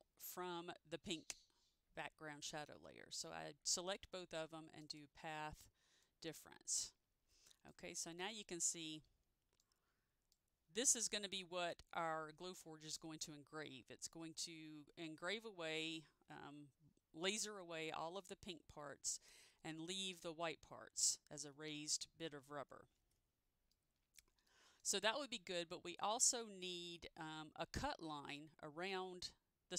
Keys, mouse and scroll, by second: 4.9 click, 7.8 click, 8.6-8.9 scroll down 1, 9.7 click, 21.8 ctrl+z, 23.9 middle click, 24.6 middle click.